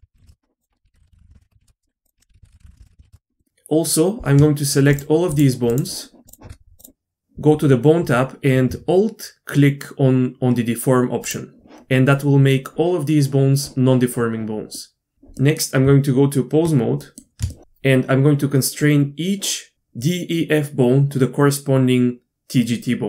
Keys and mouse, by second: 0.3 Left, 0.7 F2, 0.9 BackSpace, 1.1 Left, 1.1 BackSpace, 1.3 Left, 2.2 F2, 2.4 BackSpace, 2.6 Left, 2.6 BackSpace, 2.8 Left, 3.4 middle click, 4.9 shift+click, 5.7 shift+click, 11.2-11.6 alt+drag, 14.8 middle click, 15.4 middle click, 15.8 Tab.